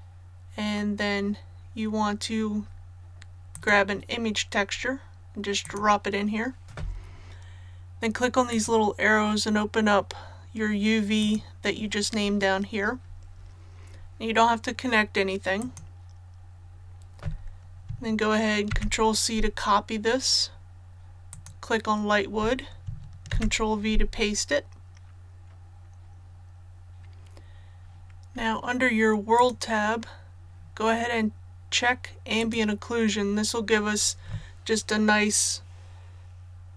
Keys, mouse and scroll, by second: 21.3 click, 23.3 ctrl+v, 26.9-28.3 scroll down 1, 29.3 click.